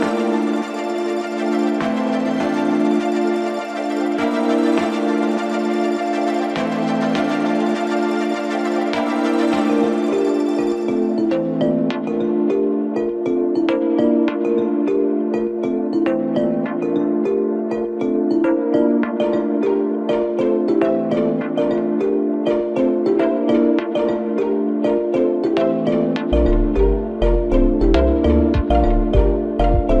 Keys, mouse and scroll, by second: 0.8 0, 3.1 scroll down 2, 4.0 scroll up 1, 4.7-5.4 middle drag, 5.4-5.7 scroll down 5, 7.0 KP_1, 8.0 KP_0, 8.8 scroll up 2, 10.5 g, 14.2 click, 15.2-17.8 drag, 17.8 scroll up 2, 19.0-19.5 scroll down 1, 19.6 g, 22.6 click, 23.4 KP_1, 24.2-26.3 scroll up 9, 26.3-30.0 drag.